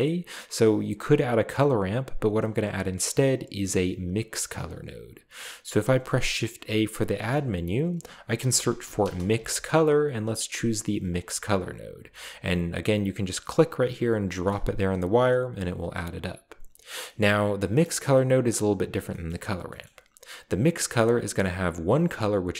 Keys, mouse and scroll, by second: 0.0-0.8 middle drag, 7.1 typing, 8.4-9.4 typing, 11.1 click, 14.5 click, 15.5 click, 17.3-17.9 middle drag, 17.5-18.4 scroll up 1, 18.1 middle click, 18.2 click, 19.3 middle click, 19.4-20.3 scroll up 1.